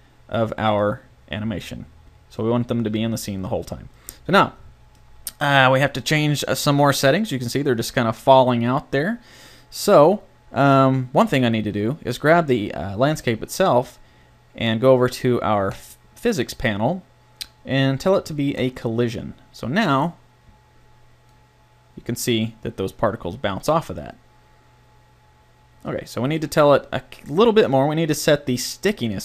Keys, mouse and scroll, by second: 5.4-8.6 middle drag, 11.2-13.0 right drag, 15.7-17.6 drag, 17.6 middle click, 18.6-20.4 drag, 20.0 right click, 21.3-23.1 middle drag.